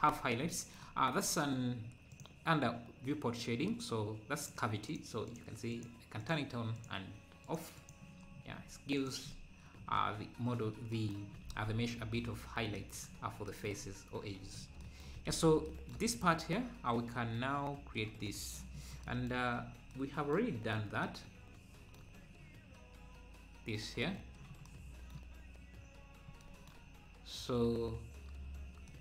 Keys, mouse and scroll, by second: 4.4-8.3 drag, 8.3 scroll down 1, 9.0 click, 12.2 click, 13.9-14.3 scroll up 4, 14.6 scroll down 3, 18.7-19.1 scroll down 1, 19.5-19.9 scroll up 2, 24.7 click, 25.6-26.1 scroll down 1, 27.0-27.4 scroll up 2.